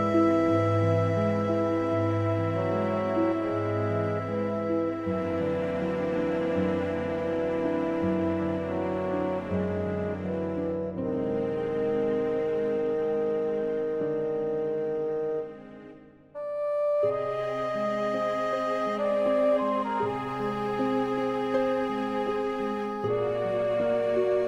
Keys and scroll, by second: 19.8 super+a, 20.1 super+c, 22.5 super+v.